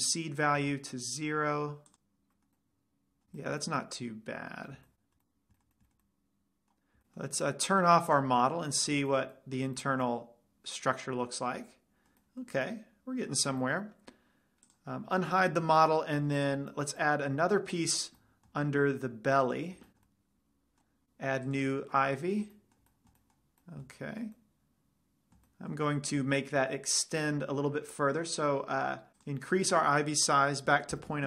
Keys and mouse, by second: 0.3-2.1 drag, 2.2 click, 2.5-2.9 middle drag, 3.9-4.5 middle drag, 5.3-5.7 middle drag, 5.9-6.5 middle drag, 6.5 middle drag, 8.5-10.3 drag, 10.3-10.8 middle drag, 16.9 drag, 16.9 right drag, 17.1 drag, 17.1 right drag, 17.3 click, 17.3 right click, 17.7 middle click, 18.0 click, 18.0 right click, 18.7 middle click, 19.7-20.5 drag, 20.5-21.4 middle drag, 21.9-23.2 drag, 23.0-23.5 middle drag, 23.5 click, 23.5 right click, 23.5-23.9 middle drag, 26.1 middle click, 29.5-31.2 drag.